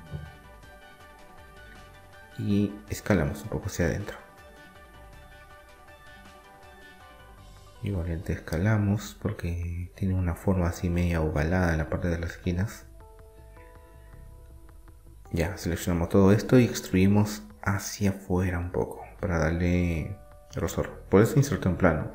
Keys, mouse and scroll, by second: 0.5 s, 3.6-6.2 right drag, 6.2 s, 9.7 Tab, 10.0-15.1 middle drag, 11.3 Tab, 14.2 a, 14.8 a, 16.2 e, 17.9-19.6 drag.